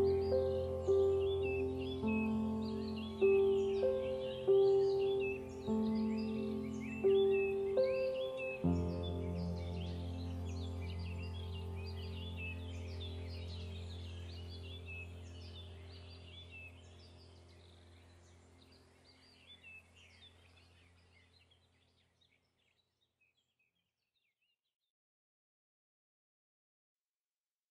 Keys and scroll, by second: 7.3 ctrl+0.